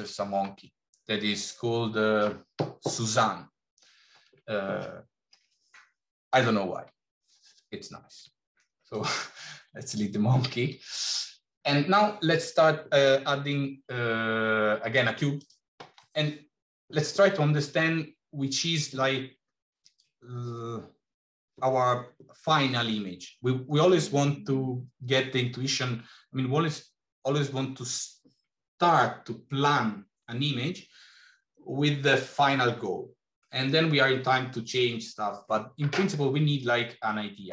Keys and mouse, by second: 8.0 x, 10.4 shift+a.